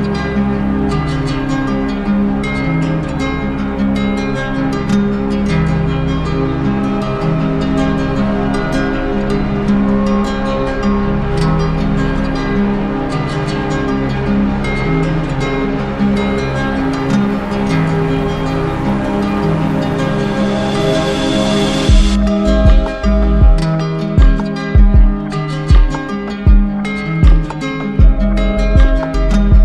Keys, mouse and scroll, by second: 0.7-1.8 drag, 3.3-5.1 drag, 8.6 click, 9.2 click, 9.7 alt+click, 10.3 alt+click, 10.6 w, 12.3 click, 12.9 alt+click, 13.4 click, 13.8 alt+click, 14.8 click, 17.8 click, 18.2 alt+click, 25.9 click, 27.0 click, 27.6-28.7 drag, 29.1 z.